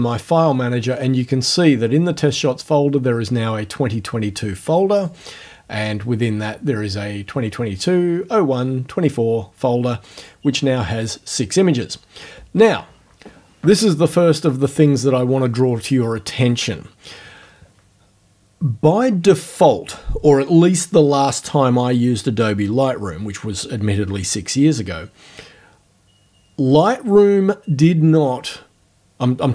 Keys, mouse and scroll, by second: 5.0 click, 10.1 click.